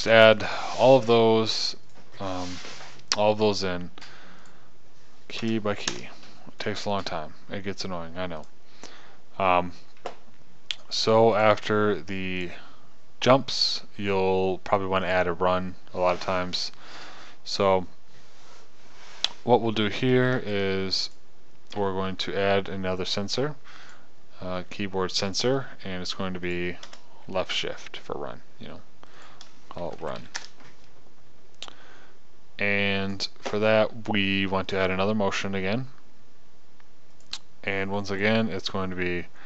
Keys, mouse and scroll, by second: 0.6 KP_0, 23.6 click, 27.0-28.7 drag, 29.7 click, 31.7-33.5 drag.